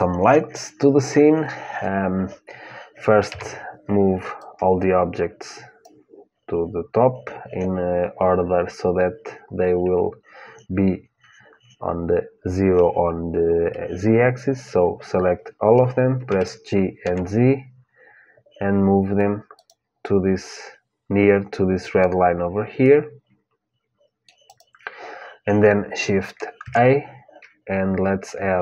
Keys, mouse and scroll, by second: 3.0 KP_1, 4.1-6.1 drag, 16.0 g, 21.6-23.5 drag, 22.6-24.6 middle drag, 24.2-26.3 drag, 26.3 shift+a.